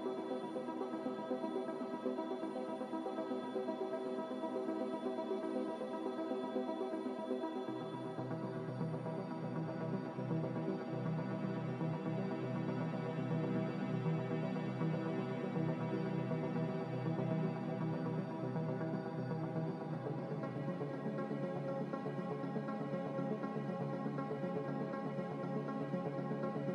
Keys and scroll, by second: 3.7 ctrl+z, 3.9 ctrl+z, 4.3 ctrl+z, 4.6 ctrl+z, 4.7 ctrl+z, 9.0-9.9 typing.